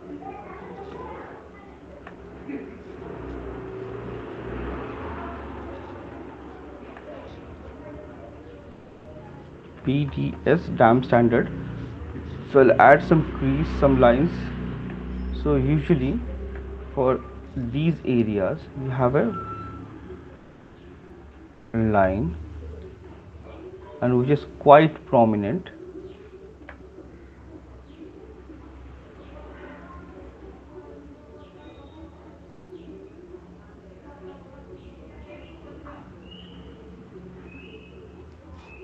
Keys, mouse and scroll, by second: 0.3 click, 0.5 click, 2.0 right click, 2.7 click, 4.4 alt+click, 5.0 click, 5.0 right click, 5.2 alt+click, 5.6 click, 6.3 alt+click, 7.0 alt+click, 7.0 right click, 9.0 alt+click, 9.2 alt+click, 9.8-10.8 typing, 12.1 alt+click, 13.7 click, 14.3 alt+click, 15.2 right click, 16.6 alt+click, 17.5 [, 17.6 [, 17.8 [, 18.6 click, 19.7 click, 22.8 click, 24.3 click, 25.0 click, 25.2 click, 25.8 click, 26.9 alt+click, 27.8 alt+click, 28.8 click, 29.5 click, 30.7 click, 31.7 click, 31.9 click, 32.5 click, 34.2 right click, 34.6 click, 34.6 right click, 35.1 click, 35.6 click, 36.2 click, 36.6 click, 37.0 click, 37.8 click, 38.2 click.